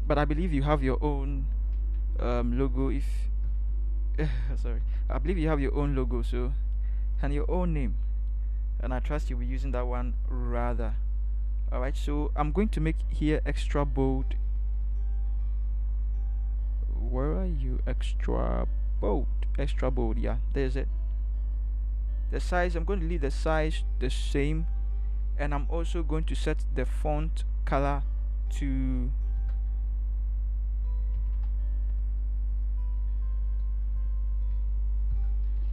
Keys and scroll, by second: 2.0 shift+Right, 2.2 shift+Right, 2.4 shift+Right, 2.6 shift+Right, 2.8 shift+Right, 3.5 shift+Right, 4.8 ctrl+z, 6.1 shift+Right, 6.1 shift+Right, 6.4 shift+Right, 6.5 shift+Right, 29.6 f, 31.2 a, 31.3 a, 33.9 b, 34.6 7, 35.1 1.